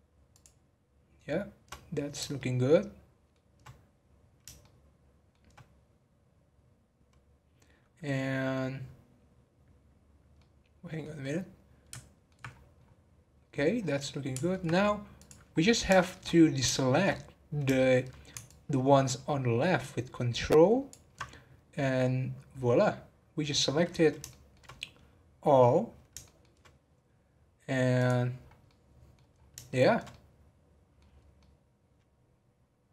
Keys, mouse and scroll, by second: 0.3 shift+click, 1.9-2.3 scroll down 1, 2.3-4.2 shift+middle drag, 4.2 scroll down 2, 4.6-7.6 shift+middle drag, 10.3-12.5 middle drag, 12.5-12.9 scroll up 6, 13.5-13.9 scroll down 9, 13.9 scroll up 1, 13.9-15.1 middle drag, 15.1 click, 15.5-16.4 scroll down 5, 15.9 shift+middle click, 16.7 shift+middle click, 17.0-17.6 scroll up 1, 17.7 shift+middle click, 18.4 ctrl+click, 24.3 shift+middle click, 24.7 scroll up 2, 26.2-27.9 shift+middle drag, 27.9 click, 28.3 scroll down 1, 28.6 middle click, 29.3-29.6 scroll up 5, 29.6-31.2 shift+middle drag, 31.2 scroll up 1, 31.3-32.9 middle drag.